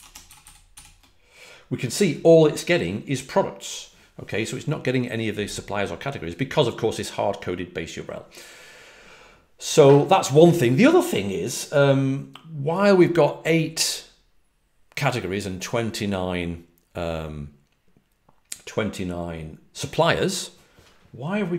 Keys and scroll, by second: 0.0-0.6 typing.